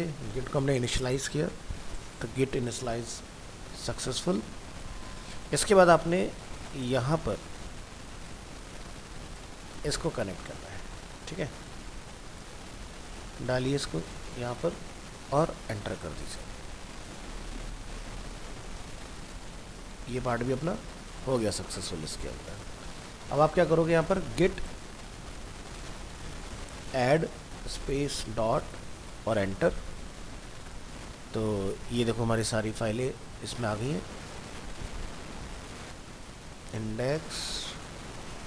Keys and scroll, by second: 10.6 ctrl+c, 11.5 alt+Tab.